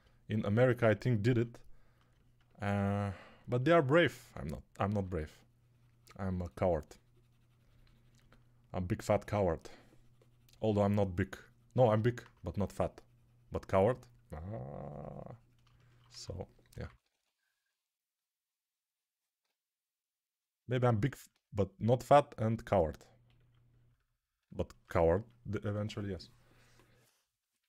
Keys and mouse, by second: 4.8 3, 16.0-17.0 typing.